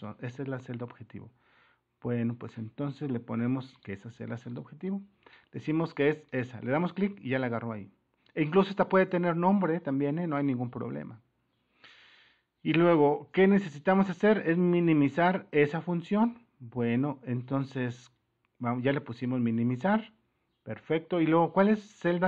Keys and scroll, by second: 16.3 super+-.